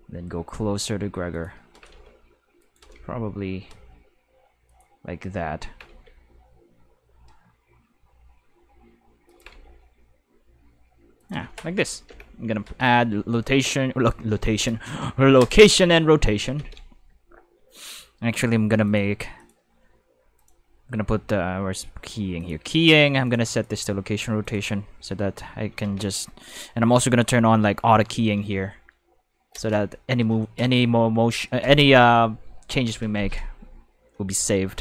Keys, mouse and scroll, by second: 1.3 click, 1.5-3.5 typing, 2.6 right click, 4.6 click, 5.4-6.4 typing, 9.1-10.1 typing, 9.3 click, 11.2 click, 12.1 5, 15.4 click, 16.6 ctrl+5, 18.8 click, 19.4 click, 20.3 click, 22.4 click, 23.3 click, 23.5 click, 24.4 click, 25.8 ctrl+5.